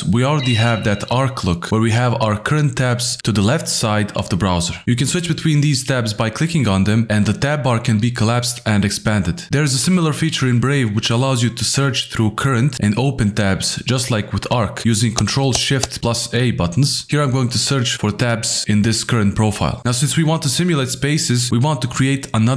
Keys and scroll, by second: 3.8 alt+shift+f, 19.8 Return.